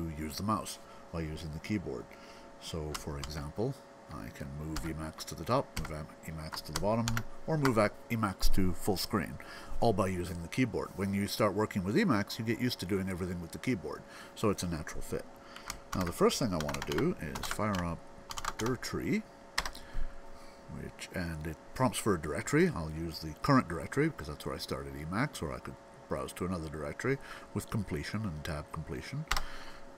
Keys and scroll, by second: 3.1 alt+super+Down, 4.6 alt+super+Up, 5.6 alt+super+Down, 6.9 alt+super+f, 15.6 alt+x, 16.2-20.3 typing, 21.8-22.2 typing.